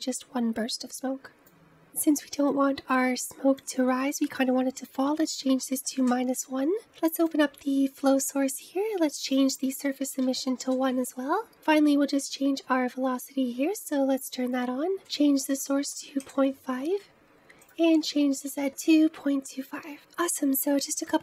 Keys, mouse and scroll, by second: 1.4-3.5 scroll down 6, 3.5-6.6 drag, 7.2-11.4 drag, 11.4-12.1 scroll down 5, 12.1 click, 12.6-14.9 scroll down 5, 14.9-19.9 drag, 21.1 shift+middle click.